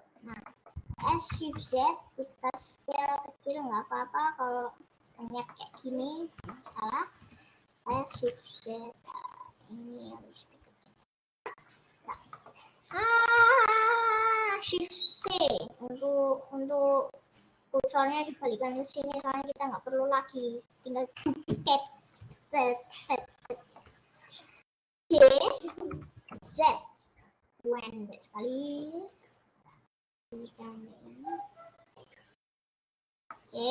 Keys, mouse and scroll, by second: 0.6 middle click, 1.0 s, 5.8 middle click, 6.0-6.4 scroll up 2, 6.6 shift+middle click, 7.2 s, 12.2 click, 12.4-14.5 middle drag, 14.5-15.0 scroll down 3, 15.2 shift+c, 18.0-18.5 scroll up 9, 18.8-19.2 scroll down 10, 19.2 middle click, 19.6 scroll up 1, 21.8-23.5 drag, 23.5-24.7 middle drag, 24.7 click, 24.8-26.0 middle drag, 26.0 g, 33.2-33.7 middle drag.